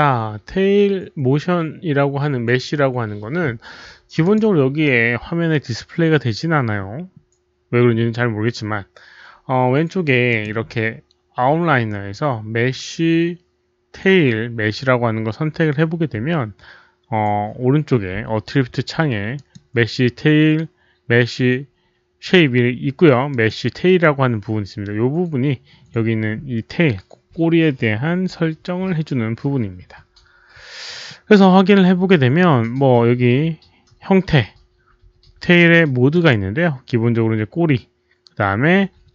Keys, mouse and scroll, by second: 4.2 click, 10.2 click, 12.3 click, 14.9 click, 17.7 click, 19.3 click, 23.2 click, 30.1 click, 36.0 click.